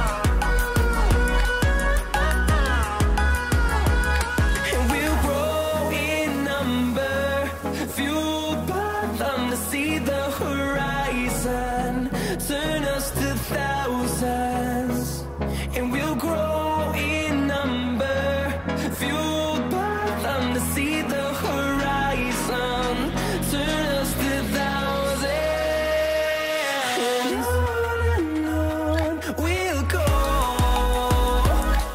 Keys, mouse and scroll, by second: 0.7-14.8 drag, 15.3-23.3 drag, 23.9-31.4 drag.